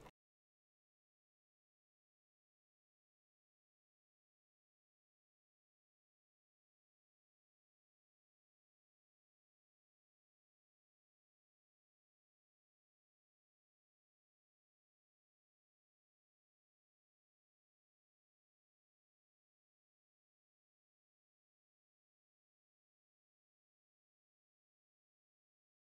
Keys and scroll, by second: 3.6 [, 5.4 space, 16.7 space, 18.5 ctrl+0.